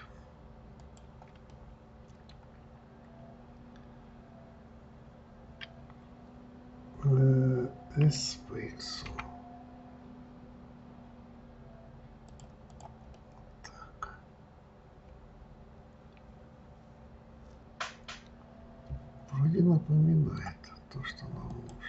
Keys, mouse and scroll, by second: 1.9-4.9 middle drag, 8.4 s, 13.1 click, 13.5-16.5 middle drag.